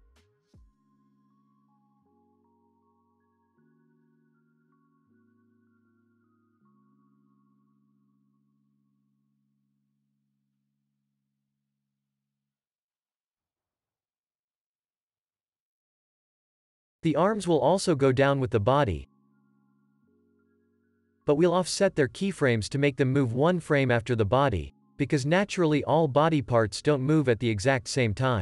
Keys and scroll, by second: 0.7 ctrl+c, 2.1 x, 3.5 ctrl+c, 5.7 F9, 7.6 ctrl+s, 12.9 alt+x, 14.3 ctrl+s, 24.5 ctrl+s, 27.4 space.